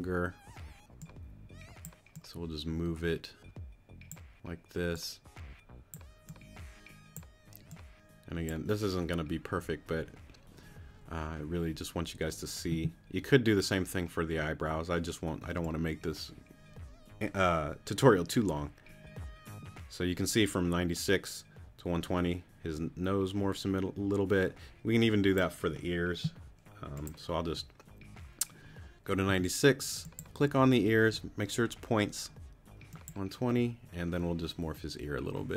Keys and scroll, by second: 29.3 t.